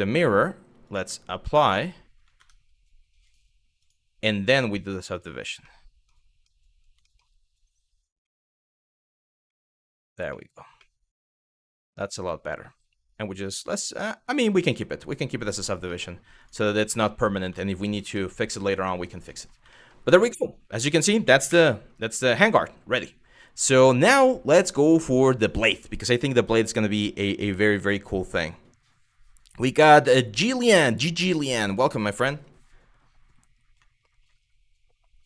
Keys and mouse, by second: 0.5-1.8 drag, 2.0 Tab, 2.9-3.5 drag, 4.7 click, 5.2-5.7 middle drag, 6.1-6.5 middle drag, 6.7 shift+middle drag, 7.9 middle drag, 8.7 click, 9.1-9.7 middle drag, 9.9 shift+middle drag, 10.4-11.2 middle drag, 11.7-12.3 middle drag, 13.1 click, 14.1 middle click, 15.1 click, 15.6 middle drag, 16.5 middle drag, 17.2 shift+middle drag, 17.9 middle click, 18.9 middle click, 19.4 shift+middle drag, 20.0 middle click, 21.1 KP_1.